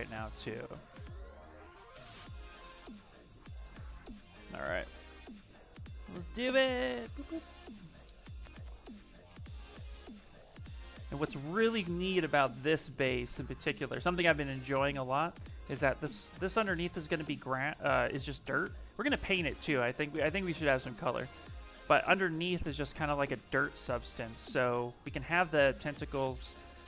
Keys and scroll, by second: 15.2 s, 16.6 shift+f, 17.1 shift+f.